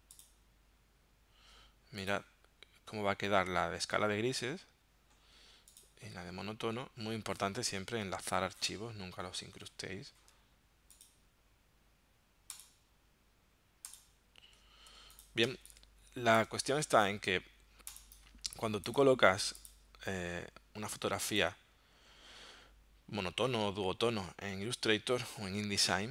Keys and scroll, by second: 14.9 v, 15.5 space.